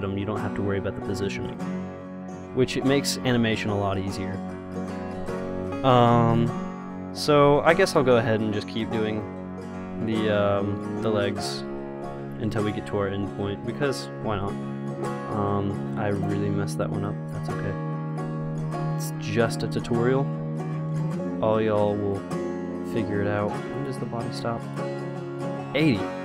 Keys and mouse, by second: 6.6-11.1 drag, 7.9-9.8 right drag, 10.2 r, 12.3 i, 13.1 r, 14.9 i, 16.5 click, 17.8 r, 18.9 i, 20.0 r, 21.0 i, 22.4-26.2 drag.